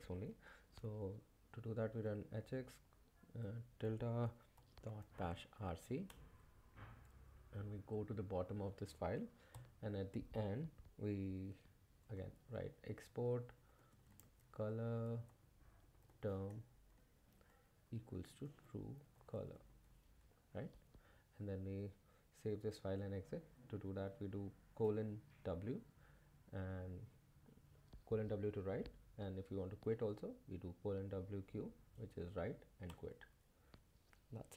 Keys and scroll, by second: 1.7-5.5 typing, 6.1 Return, 7.3-8.1 typing, 9.5 o, 11.6-20.9 typing, 12.0 Return, 20.2 Escape, 23.9 w, 32.4 q, 32.9 Return.